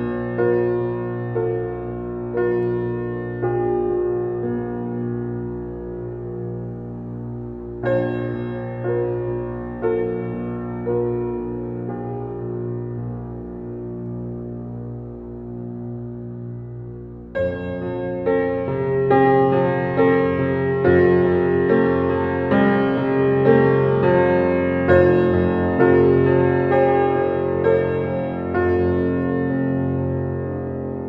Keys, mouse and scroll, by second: 1.0-9.5 drag, 9.5 x, 9.9 click, 12.2 x, 12.7-21.1 drag, 21.0-31.0 drag.